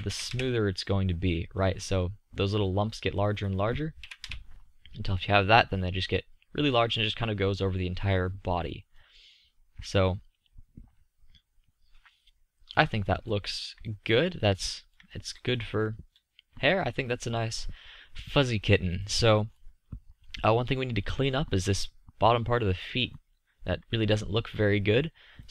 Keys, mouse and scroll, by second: 3.7-5.3 middle drag, 9.7 middle click, 11.0-14.2 middle drag.